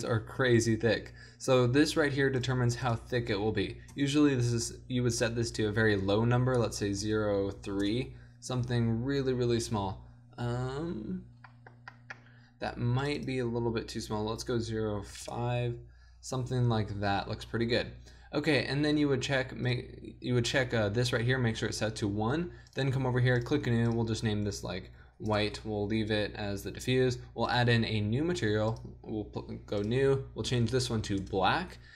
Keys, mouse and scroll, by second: 9.1 middle click, 9.5 middle click, 11.9-15.4 middle drag, 16.1 middle click, 19.8-31.9 drag.